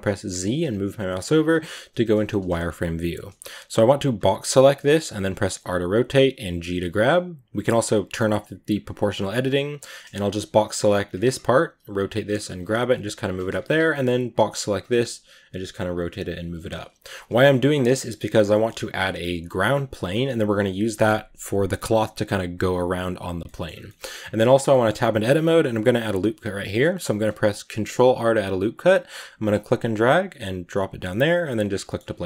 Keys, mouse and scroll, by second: 1.1 z, 4.7 b, 5.4 r, 6.2 g, 8.8-9.9 drag, 9.9 a, 11.4-13.3 typing, 14.9-16.9 typing, 16.9 scroll down 1, 17.2 Tab, 17.4-19.8 middle drag, 19.8-20.8 scroll up 3, 20.8-23.2 middle drag, 23.2 scroll up 1, 23.3 middle click, 23.5 scroll down 2, 23.7 middle drag, 23.9-25.6 scroll up 4, 24.5 Tab, 24.5 middle click, 25.7 ctrl+r, 31.5 scroll down 2, 31.7 middle click, 32.0 a, 32.1 middle click.